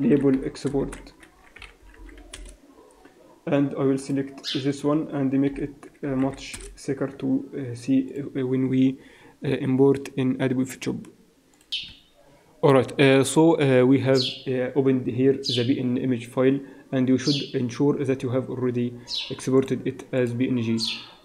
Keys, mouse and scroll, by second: 4.5 click, 5.3 click, 8.6 click.